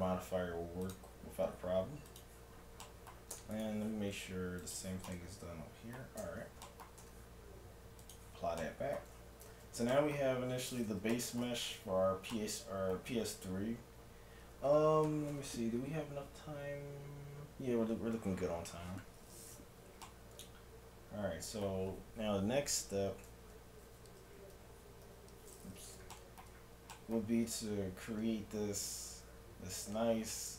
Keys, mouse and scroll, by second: 2.1-4.0 drag, 2.8-5.6 right drag, 3.4 Tab, 3.8 middle click, 4.6 click, 6.2 Tab, 7.0 Tab, 9.4 a, 9.6 z, 10.2 z, 23.4 z, 23.9 KP_7, 24.3 z, 25.1 z.